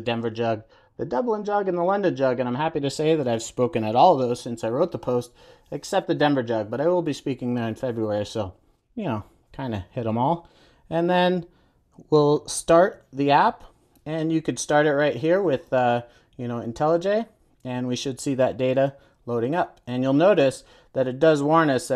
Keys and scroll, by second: 16.8 ctrl+r.